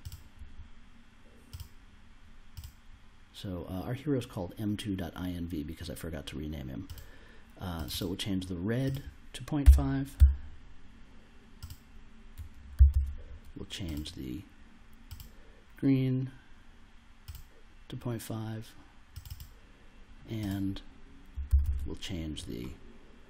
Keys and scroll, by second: 9.6 ., 10.1 5, 12.7 super+c, 12.9 super+v, 21.4 super+c, 21.6 super+v.